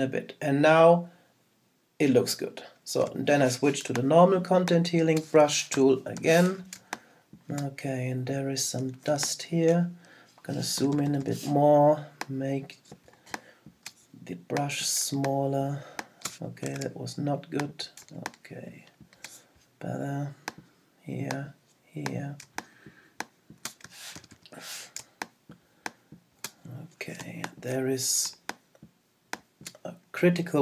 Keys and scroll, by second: 5.7 super+-, 9.1 super+space, 16.7 super+z, 24.1 super+-, 27.2 super+space.